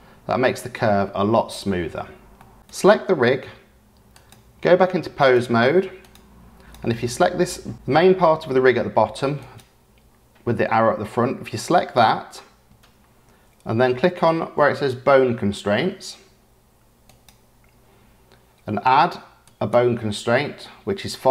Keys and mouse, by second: 2.3 click, 2.8-5.3 drag, 6.6 click, 9.4 click, 17.2 click, 19.4-21.3 drag.